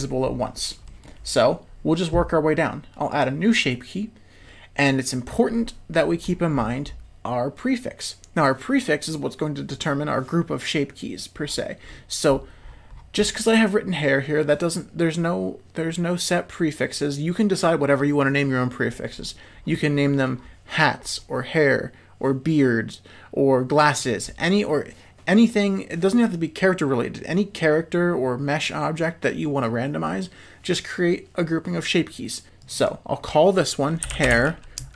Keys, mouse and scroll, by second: 0.8 middle click, 3.1 click, 32.6 click, 32.9-34.9 drag.